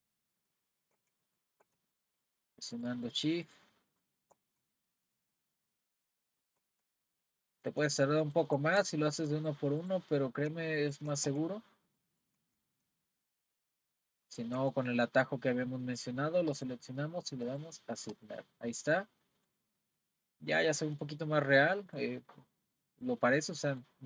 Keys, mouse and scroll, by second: 0.4 shift+click, 1.2 shift+click, 2.1 shift+click, 2.7 shift+click, 3.5 shift+click, 3.9 shift+click, 5.1 shift+click, 5.5 shift+click, 6.3 shift+click, 7.1 shift+click, 7.6 shift+click, 8.3 shift+click, 9.4 shift+click, 9.8 shift+click, 10.8 shift+click, 11.9 shift+click, 13.4 shift+click, 14.3 shift+click, 16.5 click, 17.5 click, 18.7-19.3 scroll down 2, 19.3-23.3 middle drag, 23.3-23.7 scroll down 1, 23.7-24.0 middle drag.